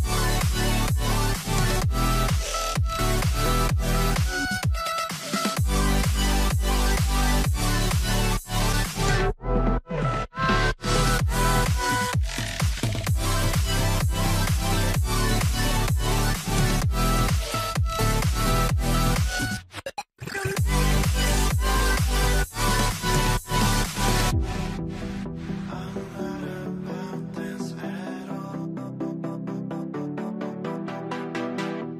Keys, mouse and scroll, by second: 0.3 scroll down 1, 2.5 scroll, 2.7 alt+middle click, 3.5 alt+scroll, 3.8 scroll down 1, 3.8 alt+middle click, 6.4 scroll down 1, 6.5 middle click, 7.0 scroll up 1, 7.6 middle click, 10.1 middle click, 11.0 middle click, 11.2 scroll up 1, 12.7 scroll down 1, 12.9 alt+middle click, 14.3 middle click, 14.4 scroll down 1, 15.0 middle click, 15.2-15.7 scroll down 1, 15.7 double click, 18.3 scroll down 1, 18.5 middle click, 18.8 scroll up 1, 20.4 middle click, 20.9 ctrl+z, 21.5-23.0 typing, 24.3 alt+middle click, 25.4 alt+middle click, 27.0 alt+middle click, 27.2 scroll down 1, 27.4 alt+middle click, 28.4 scroll up 1, 29.9 scroll up 1, 31.2 scroll down 1, 31.7 alt+middle click, 31.7 z.